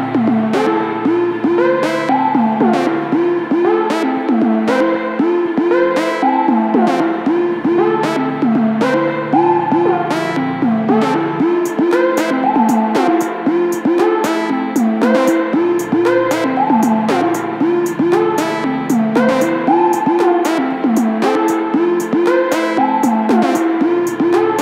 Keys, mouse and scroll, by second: 0.1 click, 0.8 s, 3.2-5.2 middle drag, 5.2 click, 5.6 s, 6.8 click, 7.0 middle click, 8.0 click, 8.2 Tab, 8.9-10.1 middle drag, 10.1 KP_7, 11.6 shift+d, 16.1 g, 19.9-21.0 middle drag, 21.0 shift+click, 22.3 KP_7, 23.4 shift+d.